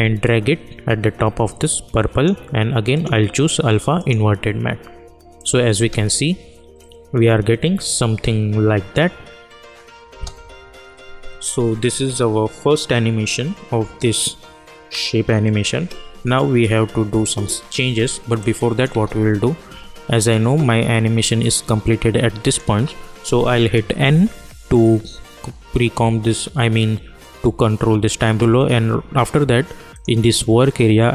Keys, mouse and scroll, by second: 1.4-5.7 drag, 5.7 space, 10.0 space, 18.3 space, 18.4 click, 18.9 space, 20.9-23.9 drag, 23.9 n, 29.9 click.